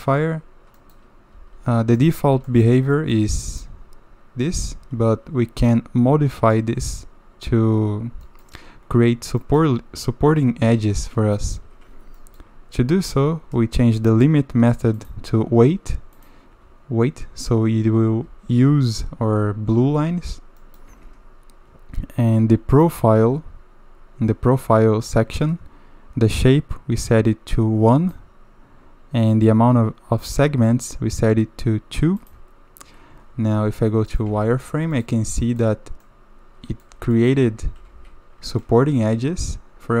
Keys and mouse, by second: 0.8 click, 1.3 Tab, 2.0 click, 2.5 shift+drag, 2.9 drag, 3.4 middle click, 8.2 middle click, 9.4 middle click, 11.4 middle click, 12.2 shift+middle click, 15.0-16.3 drag, 18.3 Tab, 20.6 click, 20.9 Tab, 22.7 click, 27.1-28.2 middle drag, 32.2 middle click, 34.1 middle click, 34.3 shift+z, 34.9 shift+middle drag, 35.4 middle click, 36.0-36.8 middle drag, 37.1-37.5 shift+middle drag, 37.5 shift+z, 37.9 shift+z, 38.6-40.0 middle drag.